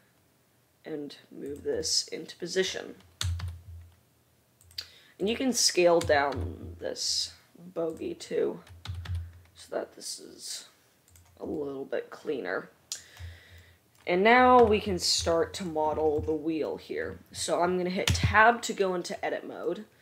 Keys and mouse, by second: 3.5 g, 4.0-17.7 drag, 5.3 middle drag, 5.3 right drag, 6.1 s, 9.0 g, 14.8 KP_Decimal, 18.8 Tab.